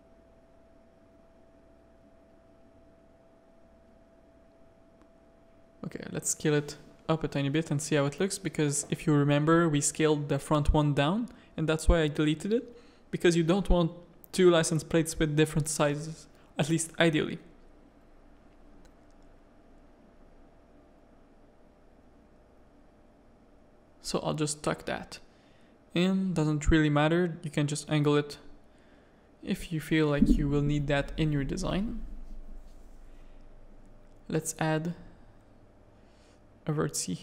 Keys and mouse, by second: 0.4 middle click, 0.9 shift+middle click, 2.2-3.6 drag, 4.0 middle click, 5.4 s, 6.2 g, 7.0 alt+a, 9.1 middle click, 10.8 click, 11.2 g, 12.5 alt+a, 13.1-14.6 drag, 14.6-16.0 middle drag, 16.7 click, 17.1 middle click, 18.3 ctrl+KP_1, 19.3 z, 19.7 shift+click, 20.4 g, 21.5 KP_3, 22.2 z, 23.3-25.0 drag, 26.6 r, 28.7 click, 29.6 click, 30.2 middle click, 30.7 Tab, 30.9 a, 31.0 click, 31.9 ctrl+KP_1, 32.9 shift+middle click, 34.2 click, 34.6 g, 35.2 a, 35.4 click, 36.4 e.